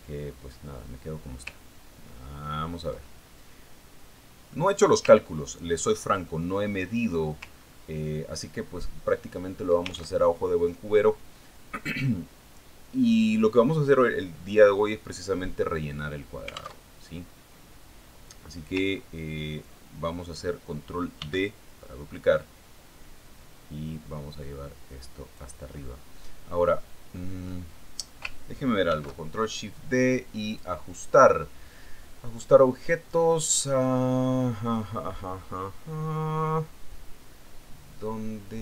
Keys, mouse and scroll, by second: 0.8-1.2 scroll up 1, 1.4 scroll down 1, 2.2-2.5 scroll up 1, 2.5 scroll down 1, 3.1-4.0 ctrl+scroll down 1, 4.5-6.3 ctrl+drag, 6.7-7.1 ctrl+scroll up 2, 7.2 ctrl+scroll down 2, 7.8-8.9 ctrl+middle drag, 9.1-9.4 ctrl+scroll up 2, 9.5 ctrl+scroll down 2, 11.8 alt+Tab, 18.3 alt+Tab, 20.5-20.8 ctrl+scroll up 2, 21.6-21.9 ctrl+scroll down 2, 22.7 ctrl+d, 23.9-27.0 ctrl+drag, 27.3-27.8 ctrl+scroll up 2, 28.3 ctrl+scroll down 2, 30.4 ctrl+shift+d, 32.0 click.